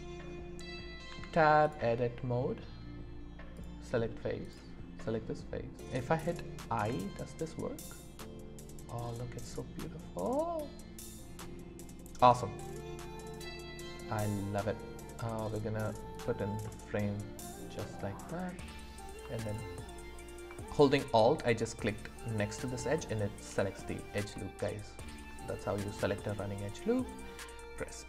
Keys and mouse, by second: 1.1 Tab, 3.5 click, 4.4 click, 5.0 middle click, 6.8 i, 16.1 click, 16.6-18.4 middle drag, 24.3 middle click, 27.8 e.